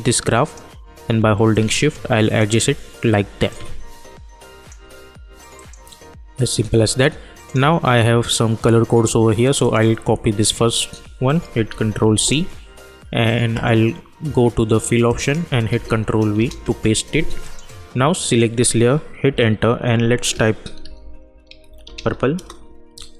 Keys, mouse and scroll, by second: 3.4-5.5 drag, 11.6 ctrl+c, 12.1 click, 15.6 ctrl+v, 16.3 Return, 17.4 click, 19.2 Return, 20.5-22.4 typing.